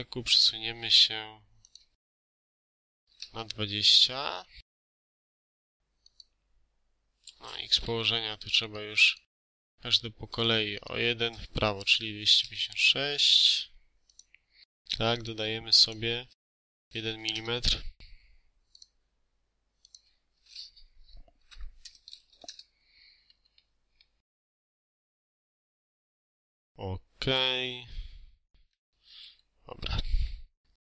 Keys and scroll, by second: 2.1 BackSpace, 2.7 0, 3.0 Return, 7.7 Escape, 11.5 BackSpace, 12.0 6, 12.2 Return, 13.2 Escape, 16.4 BackSpace, 17.0 3, 17.2 Return, 17.6 Escape, 21.3 Right, 21.6 BackSpace, 22.1 3, 22.3 Return, 23.1 Escape, 28.0 3, 28.2 7, 28.2 6, 28.5 Return, 29.0 Escape.